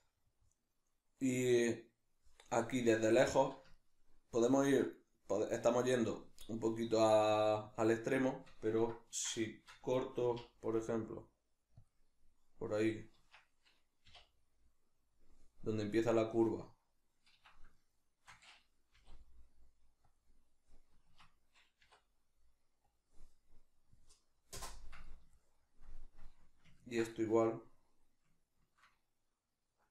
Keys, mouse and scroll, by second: 10.3 k, 17.8 shift+middle click, 18.9 k, 25.3-29.9 shift+middle drag.